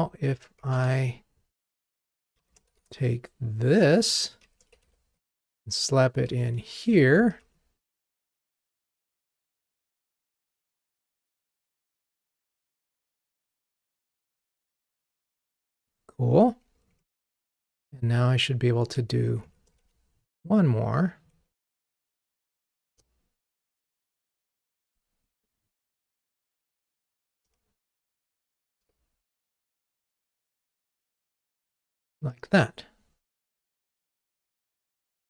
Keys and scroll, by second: 4.0 super+c, 4.7 super+v, 6.6 super+/, 7.3 ctrl+r, 17.0 super+BackSpace, 21.2 super+c, 21.9 super+v, 31.6 super+BackSpace, 32.4 ctrl+r.